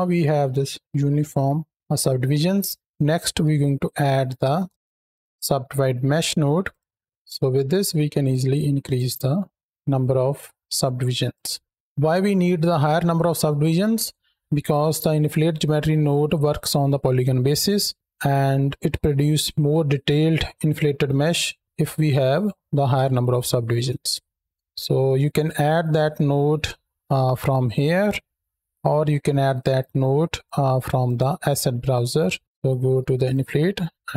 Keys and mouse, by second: 4.7 BackSpace, 6.5 click, 8.0 click, 8.7 click, 10.3 shift+middle drag, 11.1 click, 22.0-22.6 middle drag, 23.6 KP_7, 24.4 shift+a, 29.4 click, 30.9-32.4 drag, 33.1 click.